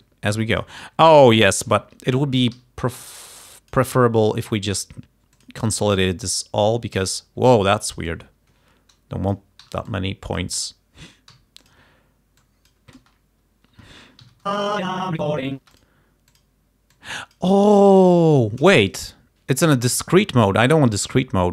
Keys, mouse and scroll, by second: 1.3 shift+right click, 1.8 shift+g, 2.6 r, 3.1 click, 4.3 right click, 5.4 click, 7.1 d, 7.4 e, 7.8-9.6 drag, 9.7 Delete, 10.0 click, 10.7 Delete, 11.4 d, 11.7 click, 12.6 click, 13.1 space, 13.8 space, 14.4 Home, 14.5 space, 15.7 space, 15.8 click, 16.4 click, 17.1 click, 18.4 shift+right click, 18.9 shift+right click, 19.7 click, 20.4-20.8 scroll up 2, 21.0 right click.